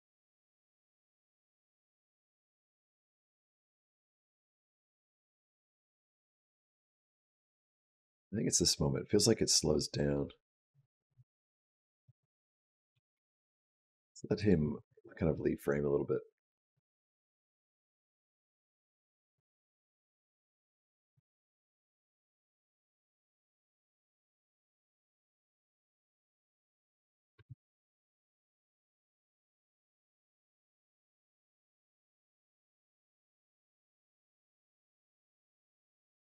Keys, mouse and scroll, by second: 3.4 space, 4.2 click, 12.3 click, 12.7 g, 15.2 click, 20.1 click, 21.0 r, 22.1 click, 27.2 space.